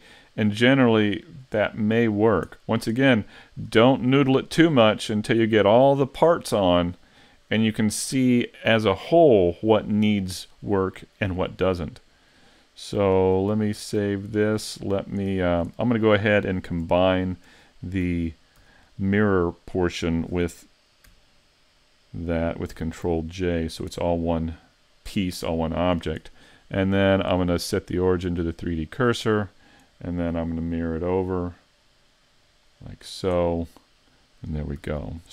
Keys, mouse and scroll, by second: 1.2 middle click, 1.7 middle click, 2.2 scroll down 1, 2.6 shift+middle click, 3.0 middle click, 11.5 right click, 12.3 middle click, 13.5 s, 14.7 middle click, 15.4 scroll up 5, 15.8 shift+middle click, 17.1 shift+right click, 18.1 z, 18.6 z, 19.0 middle click, 22.7 ctrl+j, 23.6-24.0 scroll down 4, 24.0 middle click, 28.1 click, 30.8 click, 33.1-33.5 scroll down 2, 33.5 middle click, 34.8 a, 35.0-35.3 scroll down 2.